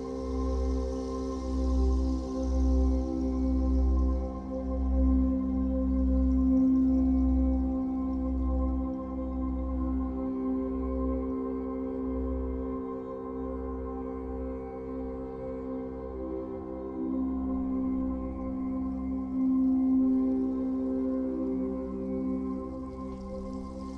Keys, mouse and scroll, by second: 0.6 ctrl+z, 3.0 click, 5.2-22.7 drag, 8.9 ctrl+z, 22.7-23.9 middle drag.